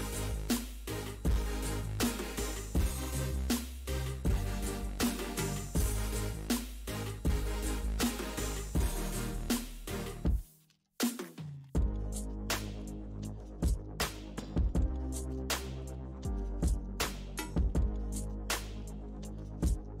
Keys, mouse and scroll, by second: 0.6 space, 1.0 f, 1.9-5.2 drag, 5.2 middle click, 5.6-8.6 drag, 9.3 middle click, 9.8-10.8 drag, 10.8 middle click, 11.2-13.4 drag, 13.4-14.8 middle drag, 14.8-17.8 drag, 18.3 middle click, 18.8-20.0 drag.